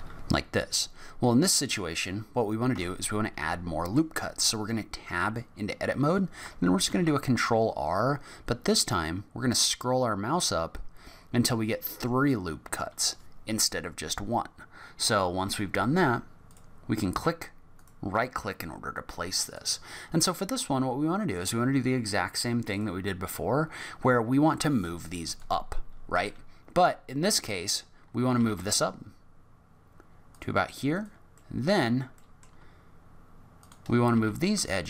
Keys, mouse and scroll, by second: 0.0 middle click, 0.1-1.7 scroll up 5, 2.7 Tab, 3.1 middle click, 6.9 ctrl+r, 19.4 click, 22.7 click, 25.3 click, 26.1 click, 28.4 g, 30.9 click, 31.4 middle click, 32.1 middle click, 33.5 shift+click, 34.1 g.